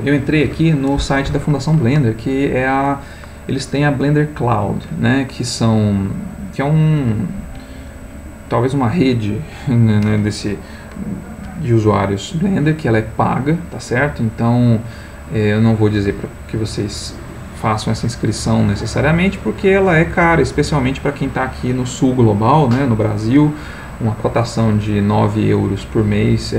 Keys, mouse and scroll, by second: 14.7-15.8 scroll up 2, 16.2-16.8 scroll up 1.